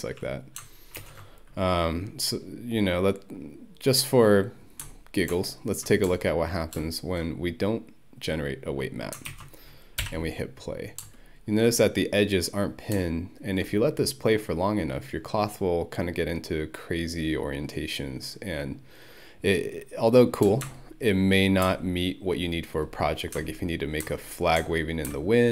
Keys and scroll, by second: 1.0 ctrl+F1, 9.3 ctrl+1, 10.0 Home.